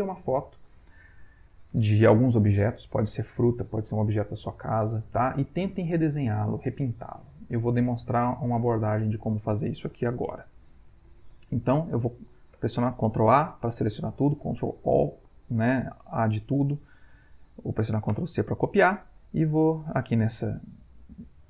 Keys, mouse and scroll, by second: 12.6 ctrl+a, 14.0 middle click, 15.4-17.2 middle drag, 18.2 ctrl+c, 19.7 click, 21.0-21.4 ctrl+middle drag.